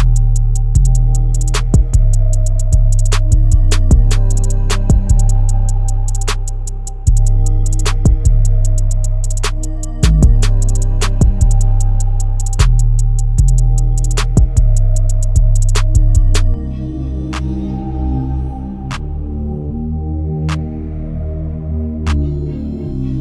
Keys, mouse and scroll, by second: 0.1-2.0 drag, 3.3-5.1 drag, 5.4-7.2 drag, 13.1-14.4 middle drag, 14.4 scroll up 2, 14.6 middle click, 15.6-17.4 drag, 19.8-20.4 middle drag, 20.4-20.8 scroll down 3.